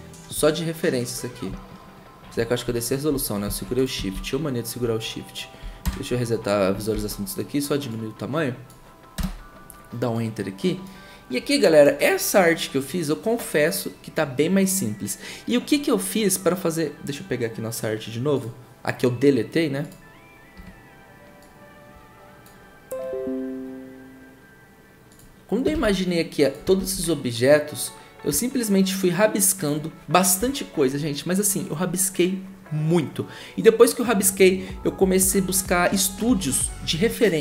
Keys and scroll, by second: 4.1 ctrl+z, 5.8 ctrl+0, 6.9 ctrl+t, 9.1 Return, 20.5 Print, 25.9 ctrl+v, 26.8 ctrl+t, 30.4 Return.